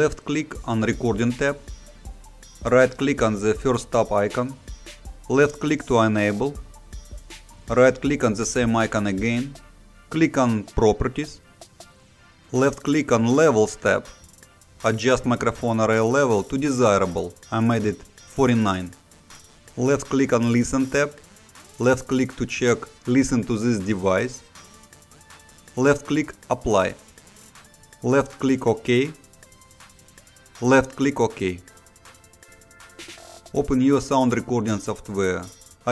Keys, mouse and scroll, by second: 1.8 right click, 4.9 click, 6.7 right click, 10.0 click, 12.9 click, 21.6 click, 25.4 click, 28.0 click, 31.1 click, 35.7 click.